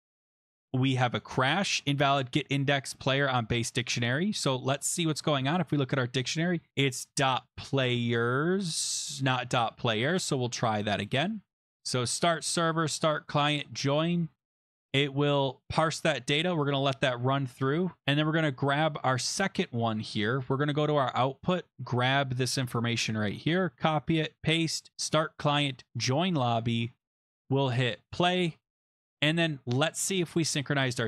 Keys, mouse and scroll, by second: 1.2 click, 3.8-5.3 scroll, 5.3 click, 6.0 scroll, 8.7 click, 9.4 click, 9.6 s, 10.7 click, 11.9 click, 12.7 click, 13.6 click, 15.3 click, 16.4 click, 18.8 click, 19.2 click, 20.5 click, 21.7 click, 21.7 click, 22.6 ctrl+c, 23.5 click, 24.2 click, 24.3 ctrl+v, 24.9 click, 25.9 click, 28.1 click, 29.1 click, 29.4-29.9 scroll down 4, 30.8 click.